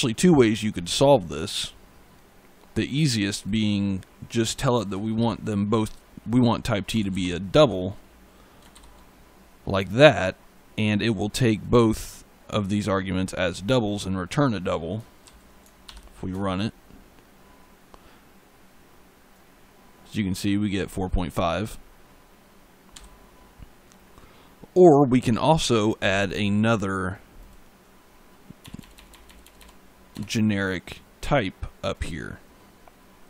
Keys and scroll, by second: 5.7-8.0 typing, 15.1 ctrl+s, 15.7 ctrl+F5, 22.8 e, 28.5 BackSpace.